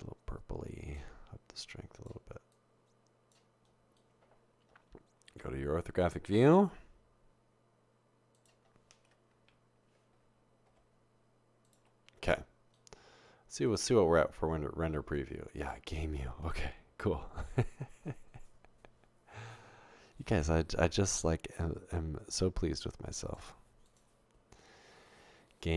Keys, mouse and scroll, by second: 1.6 click, 2.5 click, 6.6 typing, 9.3 typing, 10.7 typing, 16.8 typing, 21.6-23.4 drag.